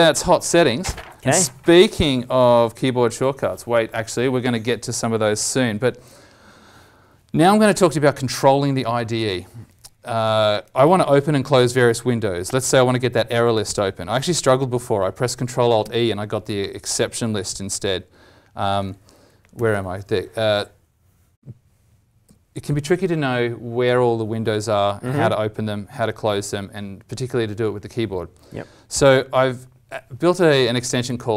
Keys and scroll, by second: 15.7 ctrl+alt+e, 19.5 ctrl+alt+e, 31.0 alt+Tab.